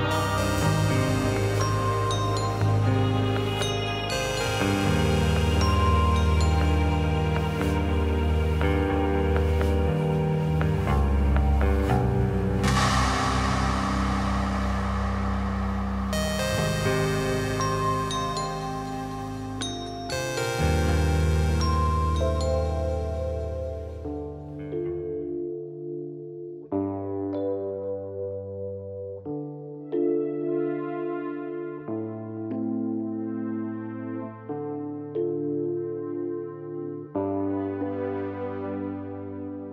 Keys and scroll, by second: 18.1 0, 27.2 0, 29.7 Page_Down.